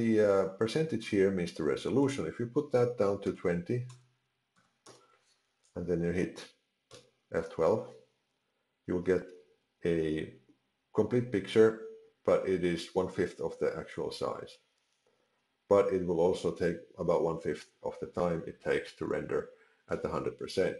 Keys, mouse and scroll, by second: 1.9 click.